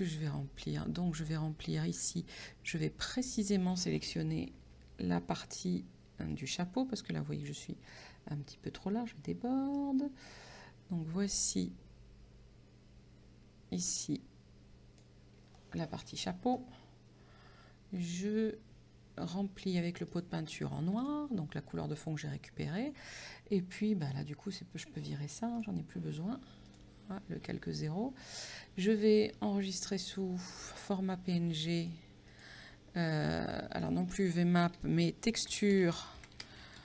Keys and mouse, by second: 3.3 click, 6.4 click, 7.9 click, 9.8 click, 20.1 click, 22.8 click, 24.1 click, 25.6 click, 26.7 click, 28.3 click, 30.0 click, 31.8 click, 35.1-36.8 typing.